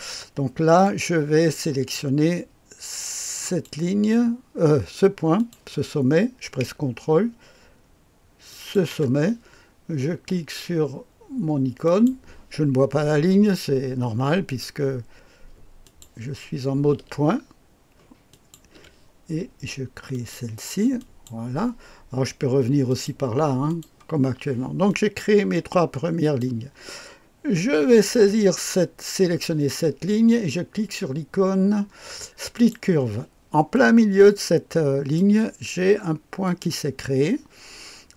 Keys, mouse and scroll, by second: 0.8-1.9 drag, 2.3 click, 3.3 click, 5.3 click, 8.5 ctrl+click, 11.8 click, 14.4 click, 15.8 click, 18.3 ctrl+click, 20.1 click, 20.9 click, 22.8 click, 23.6 click, 24.8-26.4 drag, 27.9 click, 28.4 click, 32.5 click, 33.7-35.6 drag, 36.4 click.